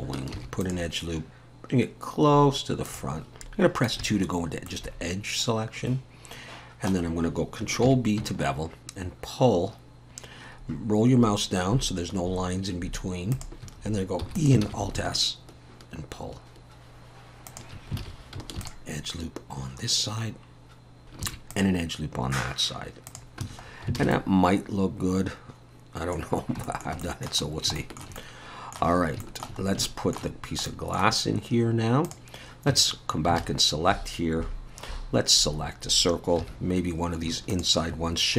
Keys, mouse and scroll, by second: 0.3 ctrl+r, 4.0 2, 4.7 middle click, 7.1-7.6 scroll up 1, 7.9 ctrl+b, 14.2 e, 14.6 alt+s, 18.0 alt+a, 18.6 ctrl+r, 21.2 ctrl+r, 23.4 Tab, 23.6-24.0 scroll down 3, 24.0 alt+a, 24.1 middle click, 26.3 scroll down 2, 26.7 shift+middle click, 27.0 middle click, 27.5 scroll down 2, 27.8 shift+middle click, 28.2 middle click, 29.0 scroll up 2, 29.2 shift+middle click, 29.6 scroll up 2, 29.9 shift+middle click, 30.4 scroll down 1, 30.7 middle click, 32.1 click, 32.9 Tab, 32.9-33.3 scroll up 2, 33.4 alt+a, 36.4 2, 37.5 alt+shift+click, 38.1-38.3 scroll down 3.